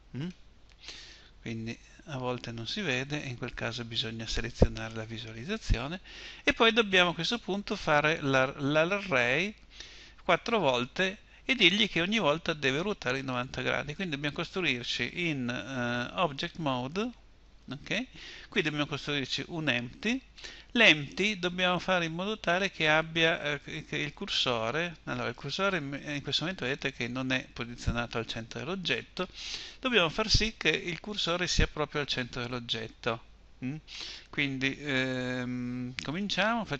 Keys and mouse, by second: 1.2 Tab, 2.5 Tab, 15.8 Tab.